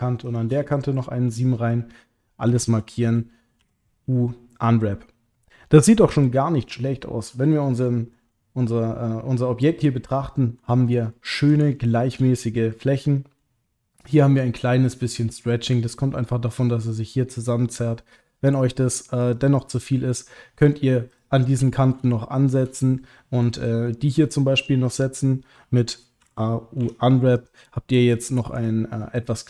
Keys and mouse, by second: 1.2 middle click, 2.5 a, 3.6 u, 6.6 click, 6.9 middle click, 7.8 ctrl+click, 8.3-10.6 middle drag, 11.1 ctrl+middle click, 11.7 shift+middle click, 12.3-13.4 middle drag, 15.3 middle click, 19.2 click, 21.1 click, 21.4 middle click, 22.1 shift+middle click, 26.2 a, 26.8 u, 28.6 click, 29.0 middle click.